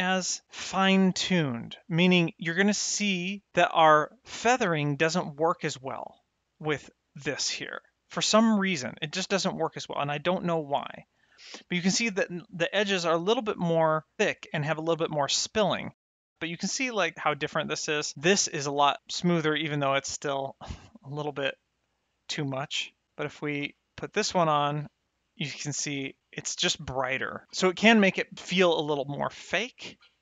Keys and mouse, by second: 1.0 middle click, 2.1 middle click, 7.0 click, 9.3 middle click, 12.0 middle click, 16.0 middle click, 16.4 middle click, 17.8 click, 18.1 m, 20.0 click, 22.6 click, 23.5 m, 23.9 click, 24.0 m.